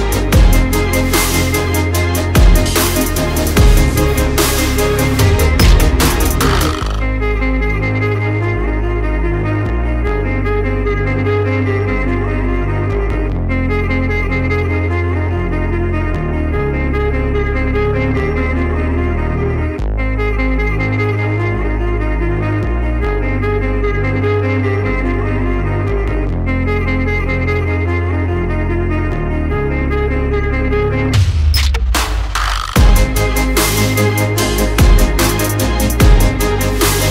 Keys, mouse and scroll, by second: 0.7 click, 1.0 double click, 2.1-2.6 alt+scroll down 1, 2.6 alt+scroll up 1, 3.9 alt+scroll up 1, 4.4 click, 4.7 alt+scroll down 1, 6.0 click, 7.4 alt+scroll down 1, 7.7 alt+scroll up 1, 9.9 click, 10.4 alt+click, 11.6 alt+click, 12.3 click, 14.6 click, 16.4 alt+scroll down 1, 16.7 click, 17.0-17.4 alt+scroll up 1, 17.4 alt+click, 19.3 click, 21.6 click, 23.9 click, 26.1 shift+click, 31.9 right click, 32.4 click, 33.1-33.4 alt+scroll up 1, 34.6 click.